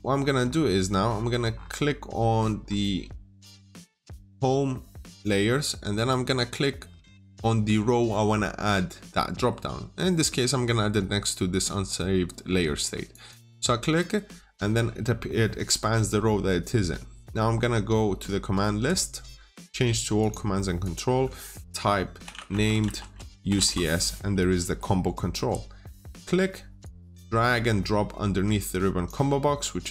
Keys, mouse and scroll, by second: 0.1 scroll down 1, 0.3-1.0 scroll up 1, 1.0-1.4 scroll down 1, 1.4 scroll up 1, 4.0 click, 14.4-18.7 scroll down 1, 18.7 click, 20.1 click, 22.1-23.4 typing, 25.8 click.